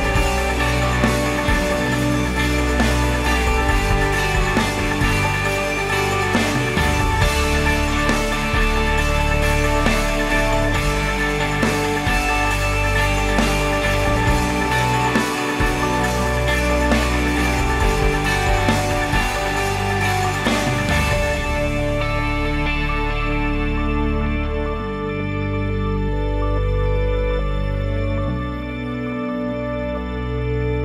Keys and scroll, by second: 0.5 1, 1.5 Return, 4.7 5, 5.5 BackSpace, 6.0 ., 6.3 5, 7.1 Return.